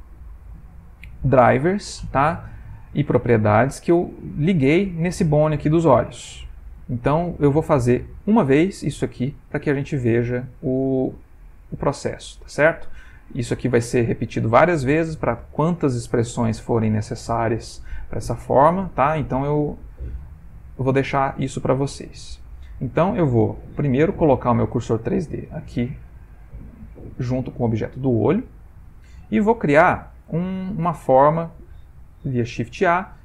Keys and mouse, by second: 1.9 middle click, 3.8 click, 5.3 g, 7.1 middle click, 9.7 middle click, 12.0 click, 13.2 middle click, 15.0 middle click, 15.2 middle click, 16.4 middle click, 16.4 middle click, 18.8 middle click, 19.5 x, 20.5 ctrl+middle click, 21.0 middle click, 22.4 click, 23.5 middle click, 23.9 shift+s, 25.7 middle click, 29.1 click, 30.9 click, 32.2 shift+a.